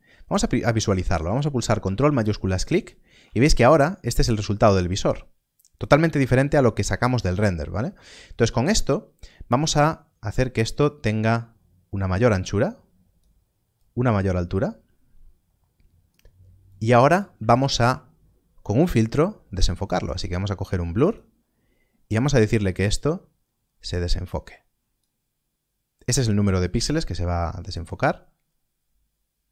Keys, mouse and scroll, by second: 1.2 click, 2.2 ctrl+shift+click, 10.6 click, 20.0 click.